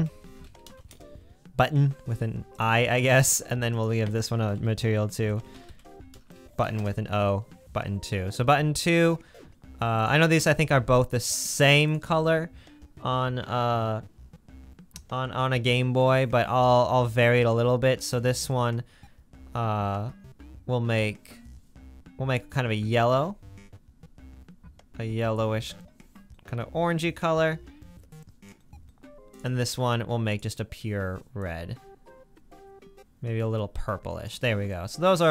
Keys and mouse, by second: 0.2 t, 2.6-3.0 drag, 5.5 t, 9.0-9.6 drag, 9.9 click, 22.1-24.5 drag, 30.3 click, 34.7-35.3 middle drag.